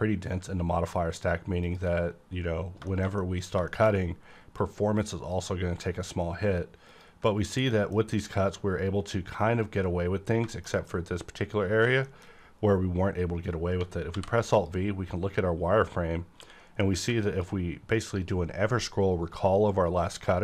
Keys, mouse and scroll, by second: 2.9 middle click, 3.2 middle click, 3.7 shift+middle click, 3.9 scroll up 1, 4.0-4.6 scroll down 1, 4.6-6.9 drag, 6.9 ctrl+click, 7.7 middle click, 7.9 scroll up 1, 10.2 scroll down 1, 10.5 middle click, 10.7 middle click, 12.0 shift+middle click, 12.2-13.8 shift+scroll up 2, 13.8-14.1 scroll up 1, 14.1 alt+v, 14.6 click, 15.0 scroll up 1, 16.4 q, 17.2 click, 17.9 click.